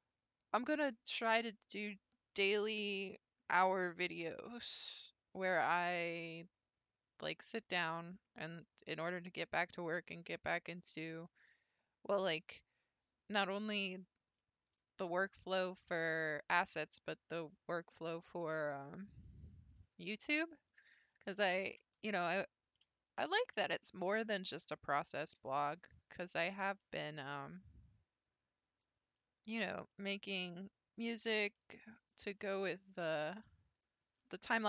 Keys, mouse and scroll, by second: 14.4-18.7 middle drag, 22.1-25.7 shift+middle drag, 25.7 alt+click, 26.8 s, 31.6-34.6 middle drag.